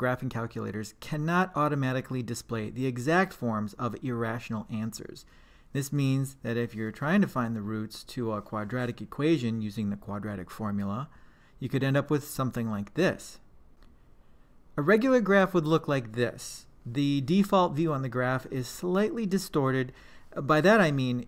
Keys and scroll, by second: 0.0 4, 1.0 Return, 1.3 7, 2.5 Return, 3.6 Return, 7.5-8.5 typing, 9.3 Down, 9.9 2, 10.8 Right, 11.2 Return.